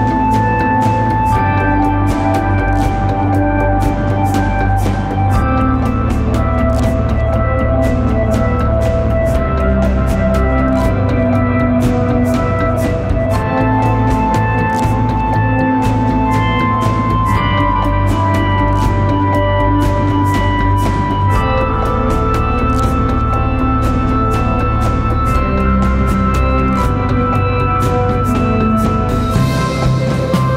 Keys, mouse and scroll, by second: 7.2 shift+click, 12.6 scroll down 1, 12.8-14.6 typing, 13.1 click, 13.5 click, 13.8 click, 15.7 shift+click, 18.2 shift+click, 21.8-22.5 typing, 21.9 click, 23.3 click, 29.2 alt+click.